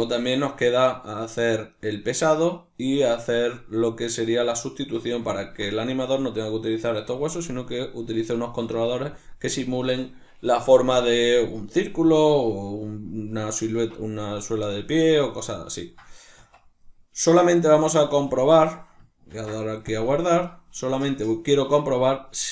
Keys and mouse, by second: 1.6 right click, 4.4 Tab, 5.3-5.8 ctrl+middle drag, 5.8 right click, 15.7-18.7 ctrl+middle drag, 16.3 Tab, 19.2 ctrl+s, 21.2 middle click.